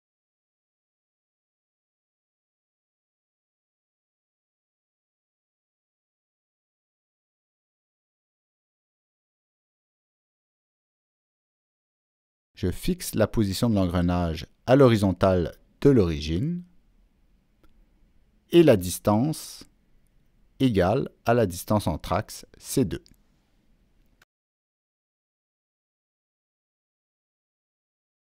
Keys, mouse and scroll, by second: 1.0-1.7 drag, 3.1 click, 3.7 click, 5.1 click, 6.4 click, 7.4 click, 12.9 click, 14.6 shift+click, 16.0 click, 17.3 right click, 19.2 click, 20.5 click, 21.5 click, 23.6 click, 24.5 Return, 24.5 Down, 24.5 click, 26.4 click, 26.5 Return, 26.5 Down, 27.9 Escape.